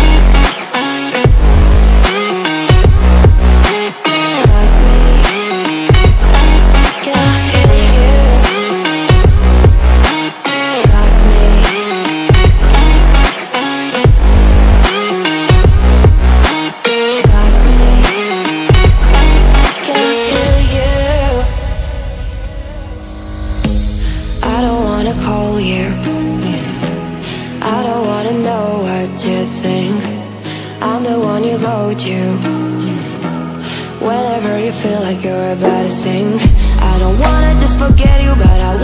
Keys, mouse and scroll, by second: 4.8-8.1 drag, 8.1 click, 11.2-13.6 drag, 13.6-15.9 drag, 18.7-28.8 alt+shift+drag, 33.1 click, 35.6 click.